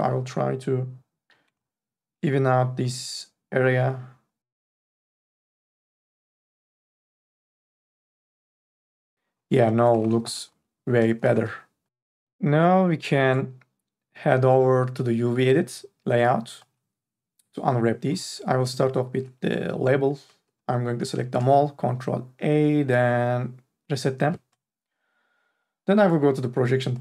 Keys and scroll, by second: 0.0-0.1 typing, 7.1 q, 10.2 q, 10.5 4, 11.3 q, 18.1 3, 19.4 ctrl+a, 21.6 ctrl+a.